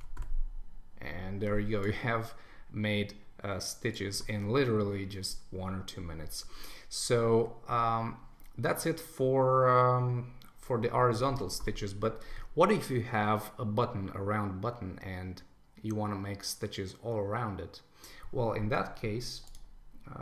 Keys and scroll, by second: 11.3 super+1.